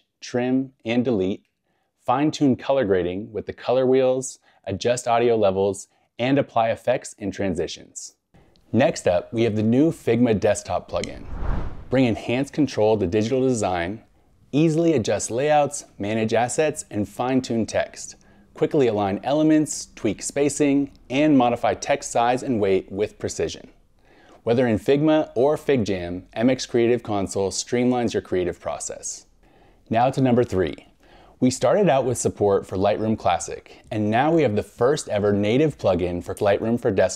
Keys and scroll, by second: 1.2 scroll, 1.3 scroll up 1, 1.4 scroll, 3.5 scroll down 1, 5.1 scroll, 8.0 scroll down 1, 11.7 scroll, 12.4 scroll, 21.1 scroll down 1, 22.7 scroll.